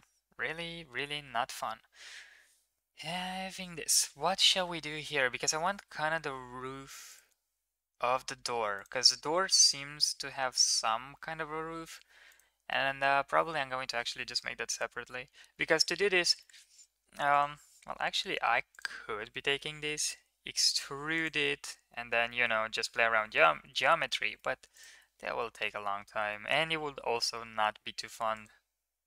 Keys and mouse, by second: 6.9 click, 16.2 middle click, 18.5 ctrl+click, 19.2 middle click, 19.6 e, 21.2 middle click, 22.2 middle click, 23.4 ctrl+z, 23.6 ctrl+z, 23.8 ctrl+z, 24.2 middle click, 25.4 shift+middle click, 26.1 shift+middle click, 27.1-27.5 middle drag, 28.2 click.